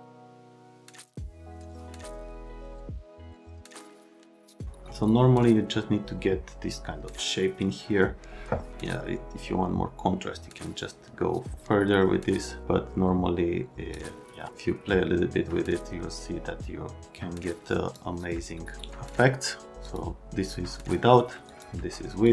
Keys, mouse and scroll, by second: 1.0 click, 1.7 click, 3.3 click, 8.7 click, 14.5 click, 19.8 click, 21.5 click, 22.2 click.